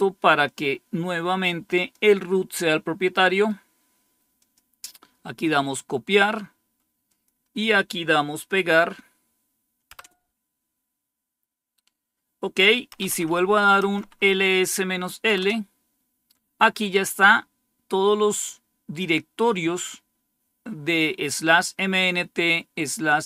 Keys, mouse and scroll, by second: 0.3-2.2 drag, 3.1 right click, 3.8 right click, 4.2 click, 5.7-6.8 right drag, 6.9 click, 9.8 Return, 12.8 Up, 13.0 Up, 13.8 Up, 15.2 Return.